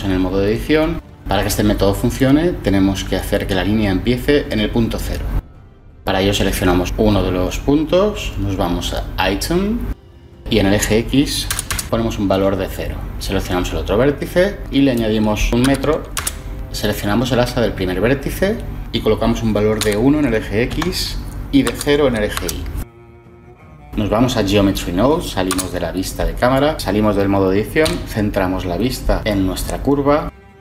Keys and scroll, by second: 0.0 Tab, 11.0 typing, 15.5 2, 16.0 Return, 19.7 1, 20.6 Tab, 21.6 0, 22.3 Return, 25.4 0, 26.7 Tab, 26.7 ,, 27.7 ,.